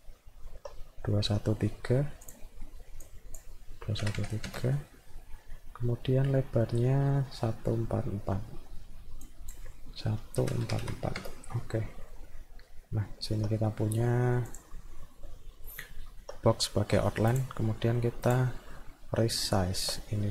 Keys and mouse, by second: 0.1 alt+middle click, 3.0 click, 6.5 middle click, 9.2 click, 12.1-13.4 alt+middle drag, 14.5 click, 15.0 middle click, 15.7 alt+middle click, 17.3 click, 17.8 middle click, 18.3 click, 18.9-19.9 alt+middle drag.